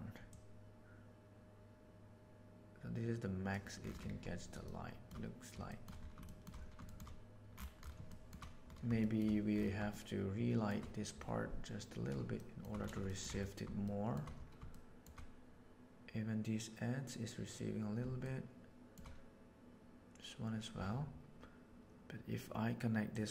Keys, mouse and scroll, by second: 0.3-3.4 drag, 4.7-5.0 shift+middle drag, 5.7 shift+middle click, 6.1 shift+middle drag, 6.9 shift+middle click, 8.1 shift+middle click, 8.9 shift+middle click, 9.9-10.7 shift+middle drag, 12.3 shift+middle drag, 13.1 shift+middle click, 13.8-14.1 shift+middle drag, 14.6-14.9 shift+middle drag, 18.3-18.9 shift+middle drag, 23.0-23.3 drag.